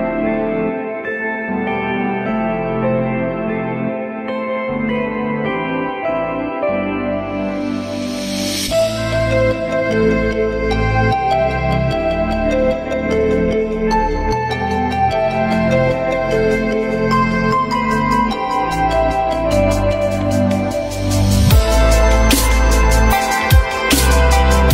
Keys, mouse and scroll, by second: 7.3 alt+middle click, 7.9 alt+middle click, 16.1 1.